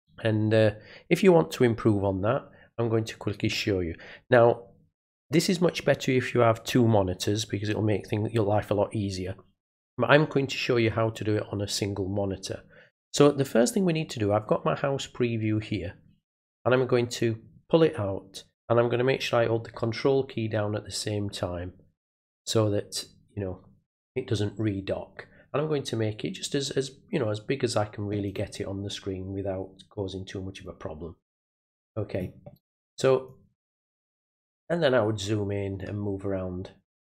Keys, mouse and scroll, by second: 16.6 click, 17.2-28.2 drag, 30.6-32.1 ctrl+drag, 33.2 ctrl+click, 34.5 middle click, 34.6-35.4 scroll up 1, 35.8-37.0 middle drag.